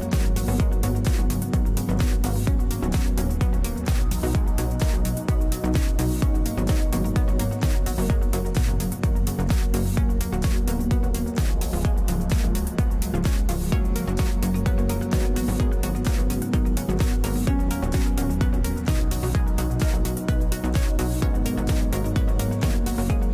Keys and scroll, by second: 10.2 e, 18.7 w.